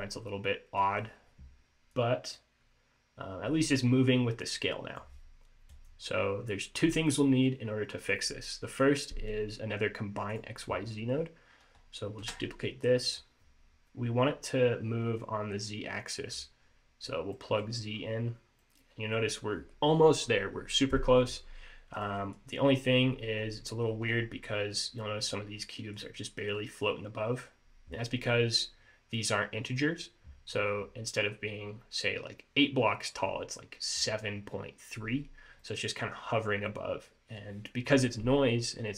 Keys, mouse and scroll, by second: 2.1 click, 5.8 click, 10.4 click, 12.3 shift+d, 15.3 click, 17.4 middle click, 18.0 scroll up 2, 18.4-18.7 scroll down 3, 18.7 middle click, 21.5 scroll up 2, 22.1 middle click, 23.1-24.2 scroll up 2, 24.3-24.8 shift+scroll up 3, 25.1 middle click, 25.5 scroll up 1, 25.8 middle click, 30.9-33.4 scroll down 2, 33.4-34.0 scroll up 2, 35.7 middle click, 36.8 middle click.